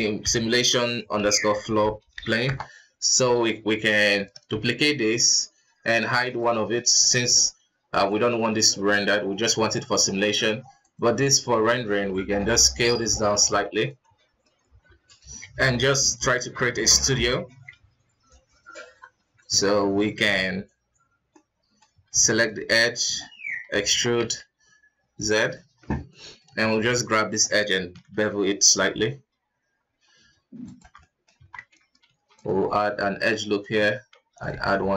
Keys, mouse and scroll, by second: 2.1 o, 4.7 shift+d, 6.4 click, 8.1-8.9 drag, 8.9-10.8 middle drag, 10.8 click, 12.1 s, 14.0-14.6 middle drag, 14.6 Tab, 15.1 scroll down 2, 15.5 s, 17.5 space, 18.3 click, 18.8 Tab, 20.1 Tab, 21.3-22.0 middle drag, 22.0 alt+KP_2, 22.4 right click, 22.8-23.9 middle drag, 23.9 e, 26.0-26.6 middle drag, 26.6 alt+right click, 27.1-28.0 middle drag, 28.0 ctrl+b, 30.8 Tab, 30.9-31.3 middle drag, 31.3 Tab, 32.0 ctrl+r, 34.1 ctrl+r.